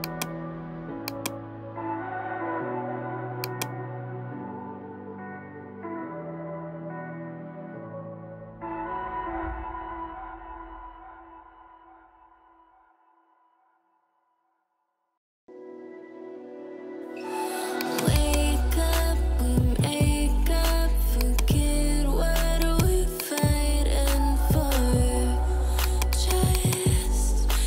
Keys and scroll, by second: 19.4 shift+b, 19.8 Return.